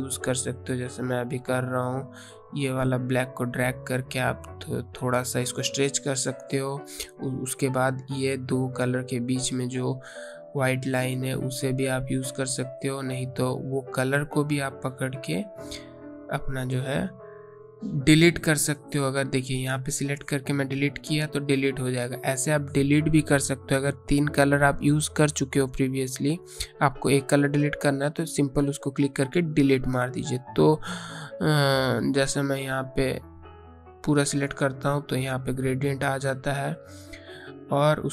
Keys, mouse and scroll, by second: 2.9 click, 12.3 click, 15.4 Delete, 18.3 ctrl+z, 20.8 click, 28.2 click, 31.1 click, 37.2 right click.